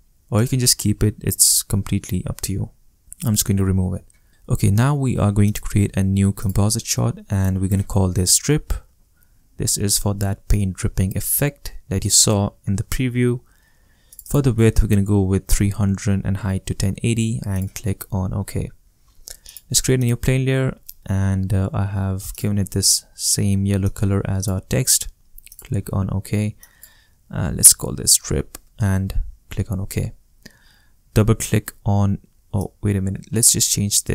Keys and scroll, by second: 7.8-9.2 typing, 14.8 3, 15.4 0, 27.2-28.6 typing, 28.6 Return.